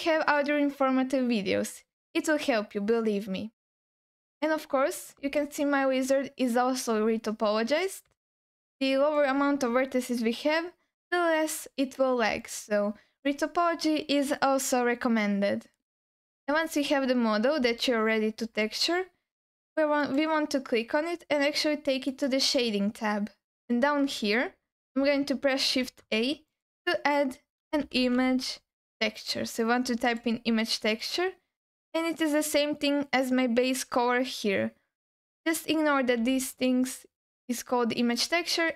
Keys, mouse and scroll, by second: 4.2-5.4 scroll up 2, 5.4-6.9 alt+middle drag, 7.5-8.0 scroll down 2, 8.3 alt+middle click, 11.0-12.2 scroll up 2, 12.4 alt+middle click, 16.6 Tab, 17.8-18.4 alt+middle drag, 18.8 scroll down 1, 20.0 click, 22.6 click, 25.8 shift+a, 35.3 click, 36.2 g.